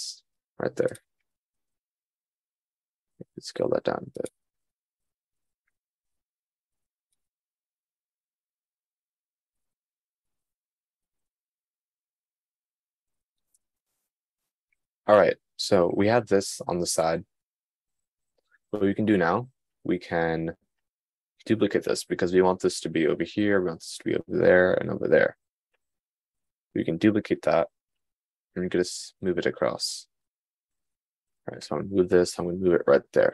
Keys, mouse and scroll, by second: 2.9 s, 6.0 g, 14.3 right click, 14.4 click, 14.7 middle click, 28.8 shift+d.